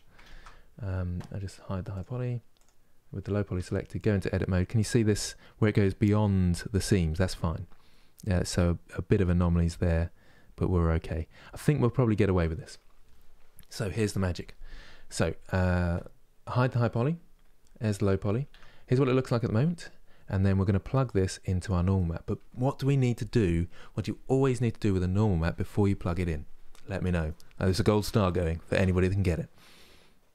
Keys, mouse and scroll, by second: 0.0 ctrl+space, 1.6 click, 3.2 Tab, 18.2 Tab, 18.5-30.3 middle drag.